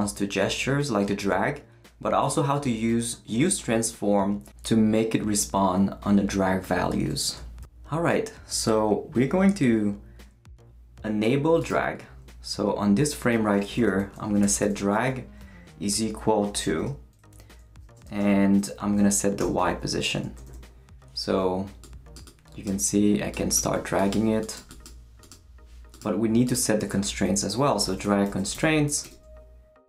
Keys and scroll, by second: 13.8-15.5 typing, 16.7 shift+[, 18.0 shift+', 19.4 y, 20.2 Right, 26.8-29.0 typing.